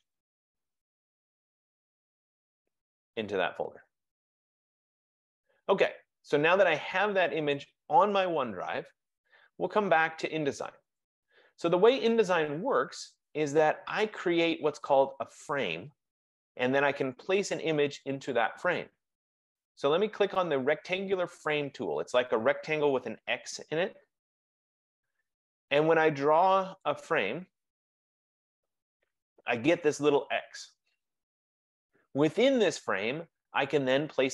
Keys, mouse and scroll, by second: 1.6 click, 11.1 click, 11.2 F15, 19.9 click, 26.9 click.